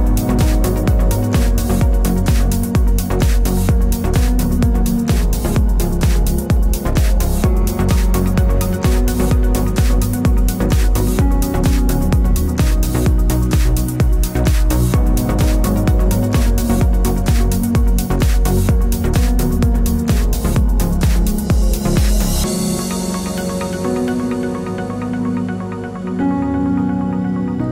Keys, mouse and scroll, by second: 0.7 click, 0.9 g, 1.7 click, 2.0 g, 2.5 click, 2.8 g, 3.7 click, 4.3-8.0 middle drag, 6.6 shift+Tab, 7.0 alt+d, 8.0 click, 8.2 r, 9.2 click, 9.5 g, 12.2 click, 13.3 alt+d, 15.0 click, 15.3 r, 16.2 click, 16.2 g, 17.1 click, 17.4 shift+Tab, 17.7 g, 18.4-25.9 middle drag, 20.2 shift+Tab, 20.4 g, 22.2 shift+Tab, 22.6 g, 25.3 alt+d, 25.9 click, 26.8 click, 27.0 g.